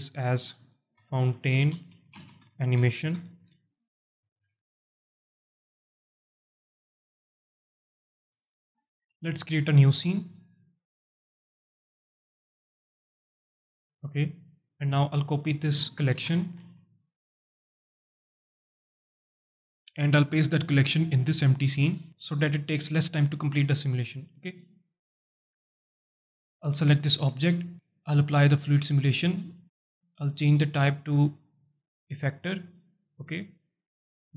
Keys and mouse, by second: 0.1 F2, 3.2 BackSpace, 3.4 BackSpace, 10.4-12.6 drag, 13.6-14.3 drag, 15.0 click, 16.1 ctrl+c, 16.6 ctrl+c, 18.1 click, 19.2 click, 19.3 click, 20.1 ctrl+v, 26.3 click, 26.9 alt+shift+drag, 28.2 click, 30.4-32.2 drag, 33.9 click.